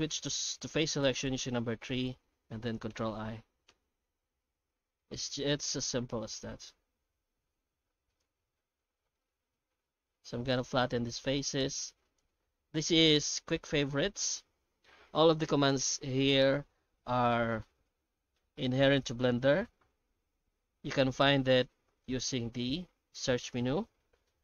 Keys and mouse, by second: 1.5 3, 2.9 ctrl+i, 3.7 ctrl+i, 5.0 middle click, 6.2 shift+middle click, 6.6 e, 8.4 q, 11.1 s, 12.6 q, 22.8 F3.